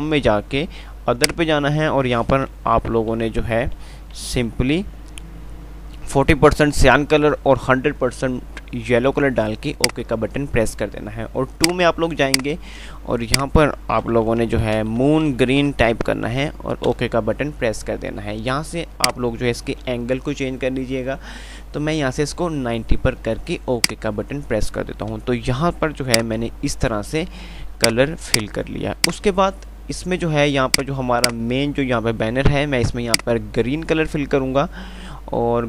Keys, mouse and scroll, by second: 26.1 5, 26.5 click, 27.0 F3, 28.1 click, 28.1 typing, 28.9 F2, 29.2 click, 29.4 F2, 30.7 click.